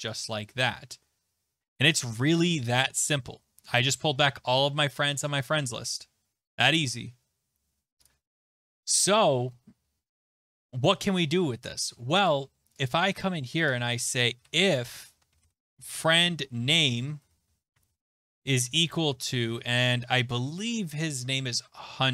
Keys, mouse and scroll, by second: 0.2 click, 2.8-4.8 scroll, 8.0 click, 9.2 click, 9.8-12.0 scroll, 12.3 click, 12.9 click, 13.6 Return, 13.7 Return, 14.1-19.6 typing, 21.1 alt+Tab.